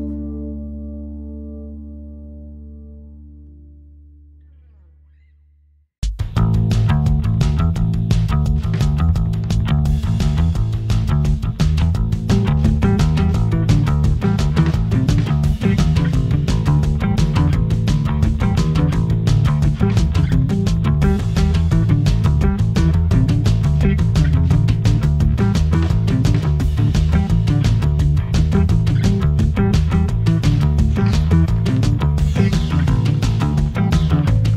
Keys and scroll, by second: 8.2 Escape, 9.1 d, 14.8 7, 15.1 Return, 17.9 Escape.